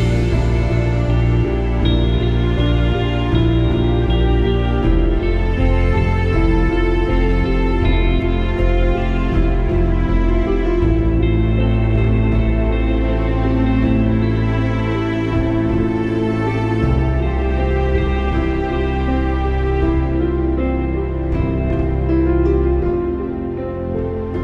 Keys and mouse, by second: 0.3 click, 1.2 Delete, 1.6 click, 2.8 click, 3.7-5.6 drag, 6.8 click, 8.3 click, 10.6 click, 12.7 click, 14.8 click, 15.5 click, 16.2 click, 17.6 click, 20.8 click, 23.9 click.